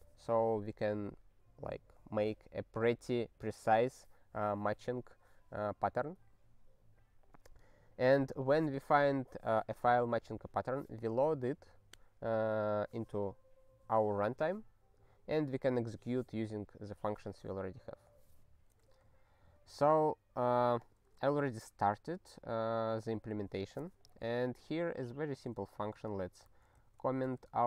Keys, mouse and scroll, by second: 20.8 click, 25.3 click, 25.6 ctrl+a, 25.8 ctrl+n, 25.9 ctrl+space, 26.4 ctrl+e, 26.7 alt+;, 27.4 ctrl+s.